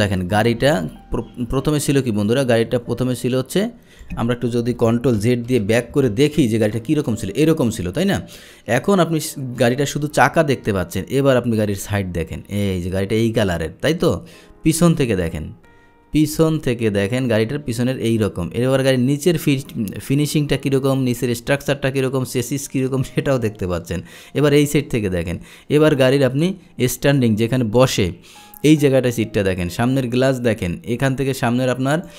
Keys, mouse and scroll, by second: 5.3 ctrl+z, 6.2 ctrl+z, 8.0-10.2 drag, 11.3-15.4 drag, 16.7-26.5 drag, 28.0-32.1 drag.